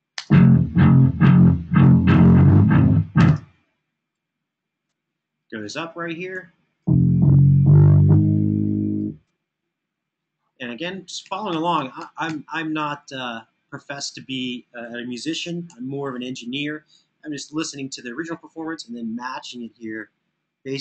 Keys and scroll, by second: 6.1 Home, 10.7 Home, 11.0 Home, 11.3 Home, 11.5 Home, 14.2 Home, 15.4 Right, 17.0 alt+f.